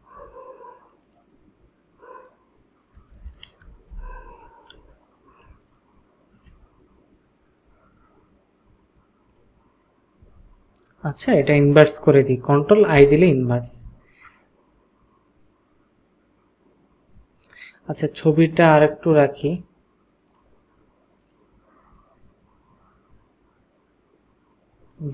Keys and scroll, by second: 3.9 ctrl+shift+-, 13.0 ctrl+i.